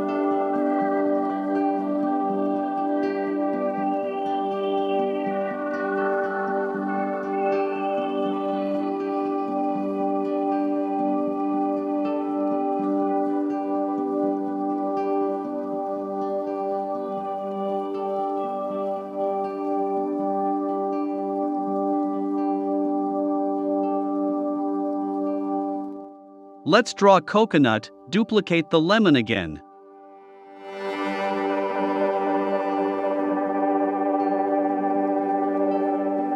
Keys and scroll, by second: 3.9 a, 6.0 super+j, 9.1 v, 10.4 i, 11.8 v, 13.5 super+[, 14.2 super+[, 16.4 super+[, 26.9 super+c, 27.1 super+f, 27.6 shift+Right, 30.1 shift+Right, 30.8 shift+Right.